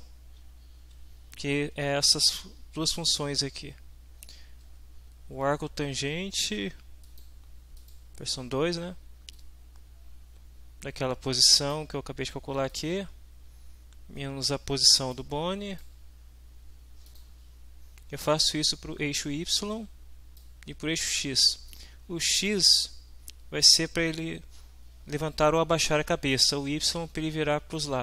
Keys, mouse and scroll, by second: 1.8 shift+End, 7.1 click, 7.8 click, 9.3-11.9 drag, 12.7 middle click, 15.1 click, 17.1 click, 18.4-20.5 drag, 20.9 click, 21.7 click.